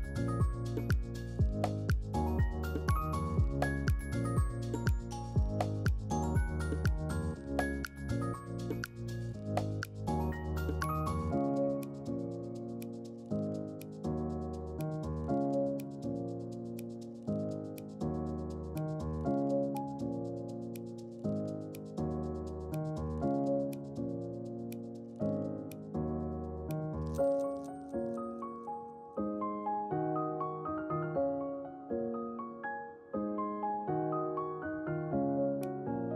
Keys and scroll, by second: 11.8 ctrl+z, 12.1 ctrl+z, 20.1 F3, 21.5 ctrl+c, 21.6 ctrl+v, 31.2 ctrl+q.